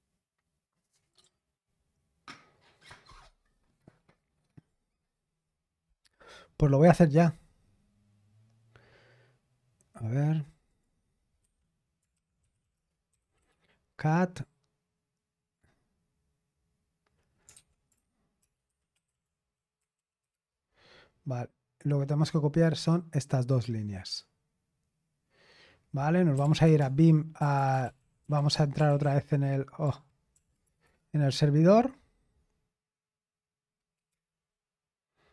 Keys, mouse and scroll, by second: 10.7 click, 11.5 Escape, 11.9-14.4 typing, 15.6-16.4 typing, 17.5-20.7 typing, 22.2-25.2 drag, 26.1-32.1 typing, 34.1 Return.